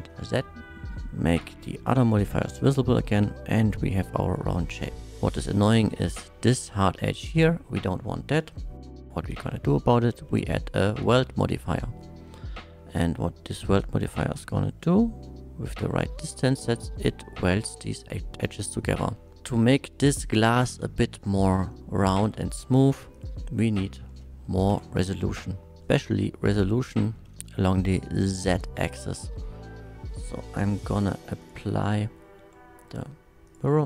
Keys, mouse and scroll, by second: 0.3 click, 1.3 click, 2.2 click, 2.6-4.8 middle drag, 6.0-6.3 middle drag, 7.3-7.6 middle drag, 8.9 click, 9.3 w, 9.5 e, 11.0 click, 11.0 l, 11.0 d, 11.8 middle drag, 12.3 shift+middle click, 13.5-16.7 shift+drag, 17.2-18.4 shift+middle drag, 18.6 shift+click, 19.0 shift+middle drag, 19.4-20.3 middle drag, 23.1 click, 24.1 KP_1, 24.7 Tab, 27.0 shift+middle click, 30.9 click, 31.4 click, 32.0 middle click, 32.4 Tab, 33.5 Tab, 33.5 click.